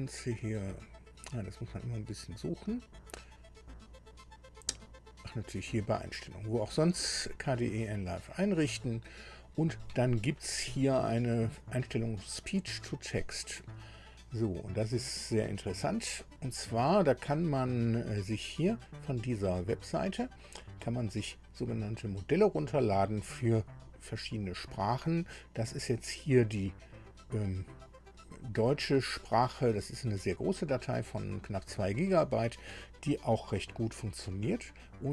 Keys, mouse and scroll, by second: 8.2 click, 13.2 click.